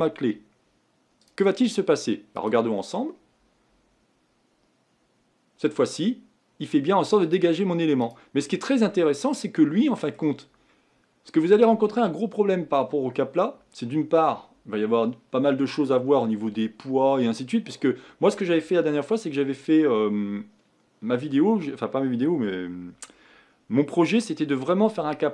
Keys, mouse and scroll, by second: 8.5-8.9 scroll down 1, 8.9-10.4 middle drag, 10.4-11.0 scroll up 1, 11.0-12.0 scroll down 2.